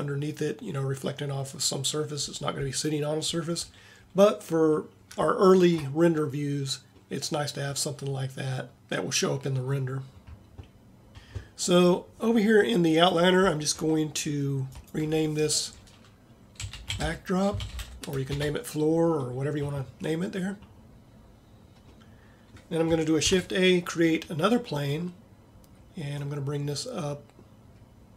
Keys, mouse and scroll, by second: 7.4 middle click, 23.3 shift+a.